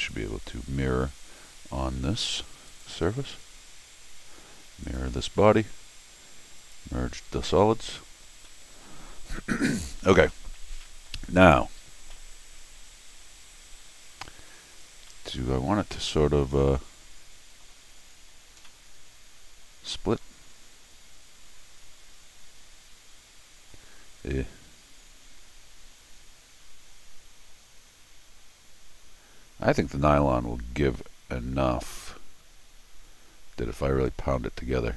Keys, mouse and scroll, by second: 0.0 click, 2.7 click, 4.8 click, 6.6 click, 8.5 middle click, 9.4 middle click, 10.0 scroll down 1, 10.3 middle click, 10.8 scroll up 1, 10.8 middle click, 11.0 middle click, 12.1-14.5 middle drag, 15.1-17.6 middle drag, 18.3 scroll up 1, 18.6-20.0 middle drag, 20.5-21.0 scroll up 1.